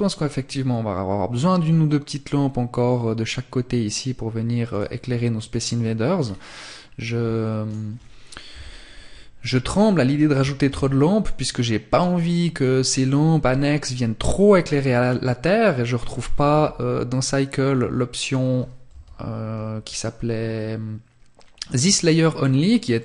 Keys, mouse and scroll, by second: 3.8 click, 5.3-6.7 scroll down 2, 6.7 right click, 7.6 KP_7, 8.8-9.2 scroll down 2, 9.7 shift+d, 11.1 click, 17.4 click, 18.0 KP_3, 22.1 middle click.